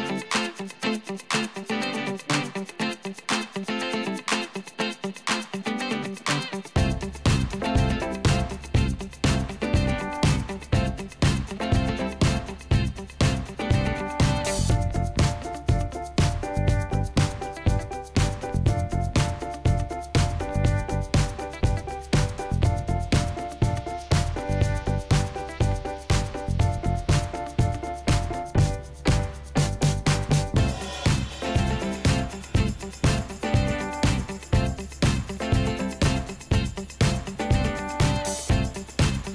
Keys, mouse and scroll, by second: 2.8 2, 3.1 Return, 13.6 5, 13.7 Return, 22.7 Return, 22.7 5.